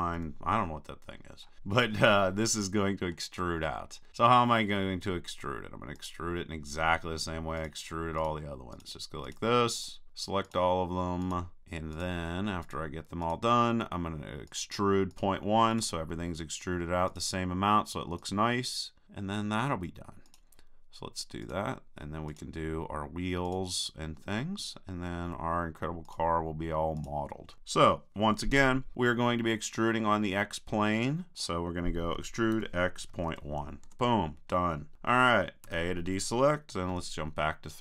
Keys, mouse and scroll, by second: 0.2-1.2 middle drag, 0.2 KP_3, 3.9-6.0 middle drag, 6.0-10.6 drag, 7.6-25.1 right drag, 25.1 click, 26.1-28.2 drag, 30.4-32.0 middle drag, 32.2 e, 35.7 a, 36.9 KP_3.